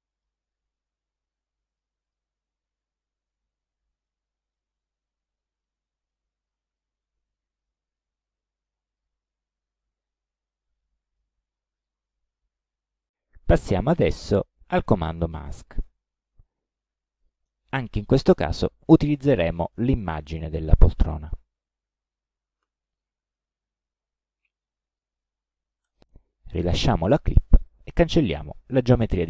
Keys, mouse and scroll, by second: 0.1-0.4 scroll up 2, 0.5 ctrl+scroll down 2, 1.7 ctrl+scroll up 2, 2.0 ctrl+click, 2.6 ctrl+scroll down 2, 3.4 ctrl+scroll up 2, 4.1 ctrl+click, 4.7-5.0 ctrl+scroll up 2, 5.6 ctrl+click, 6.7 ctrl+click, 8.0-9.2 drag, 10.2 ctrl+scroll down 1, 10.8 ctrl+click, 11.8 ctrl+click, 17.2 click, 22.7 ctrl+d, 23.4-25.2 ctrl+drag, 25.9 ctrl+click, 25.9 right click, 27.1 click, 28.0 click, 28.6 click.